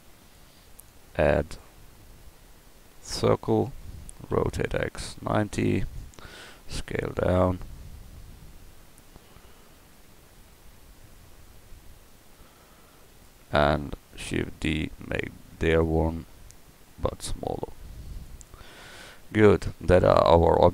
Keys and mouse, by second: 4.3 r, 6.4 s, 14.3 shift+d, 16.1 s, 19.7 Tab, 20.1-20.7 middle drag.